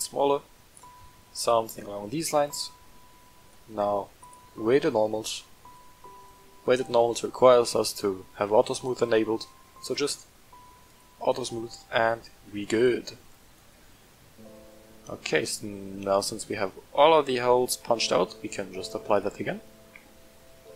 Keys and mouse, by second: 0.7-1.2 middle drag, 1.9 shift+middle click, 2.7 shift+middle click, 4.2-6.3 drag, 8.7 click, 9.8 click, 10.9 click, 11.8 middle drag, 13.1-14.8 middle drag, 15.4-17.6 middle drag, 19.1 click.